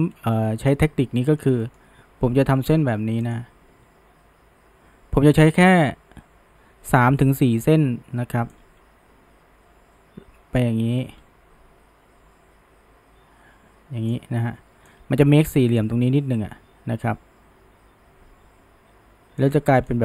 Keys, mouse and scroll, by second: 0.4-3.3 middle drag, 3.3-6.4 drag, 7.2-8.6 middle drag, 8.6-11.6 drag, 14.9-18.0 drag, 19.4-20.0 drag.